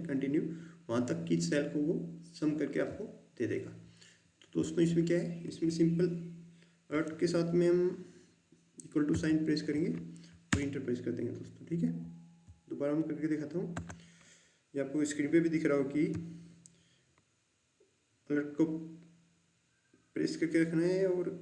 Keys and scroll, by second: 9.0 alt+=, 10.4 Return, 13.7 Delete.